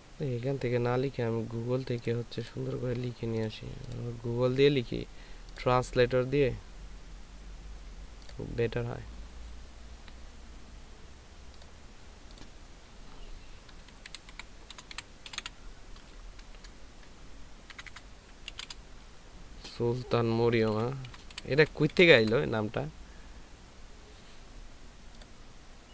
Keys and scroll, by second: 14.2-15.3 typing, 17.7-19.5 typing, 20.7-22.2 typing.